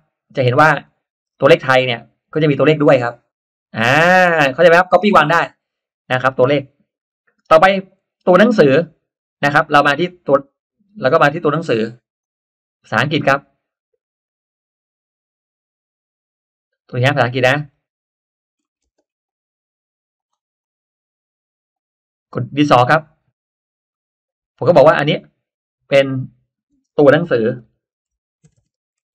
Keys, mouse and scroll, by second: 0.8 click, 3.8-4.8 drag, 12.1 click, 17.5 click, 18.5 middle click, 18.8 space, 19.2 click, 20.1 click, 21.6 click, 23.4 click, 25.8 click, 27.1-29.1 typing.